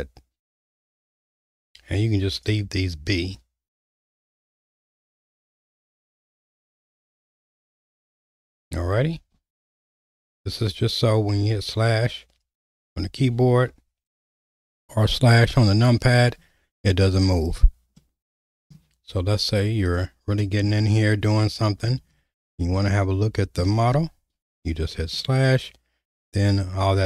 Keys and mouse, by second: 11.4-14.0 typing, 15.2 KP_Divide, 15.6 KP_Divide, 15.9 KP_Divide, 16.2 KP_Divide, 16.4 KP_Divide, 17.0 KP_Divide, 18.0 middle click, 21.4 middle click, 22.8 shift+middle click, 24.4 /, 25.2-27.0 middle drag.